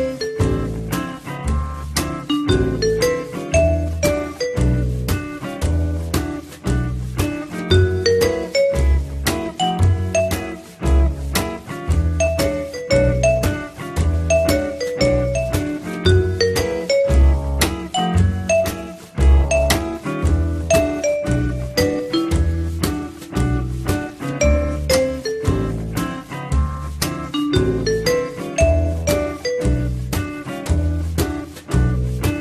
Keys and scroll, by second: 2.0 f, 24.4 F3, 26.1 p.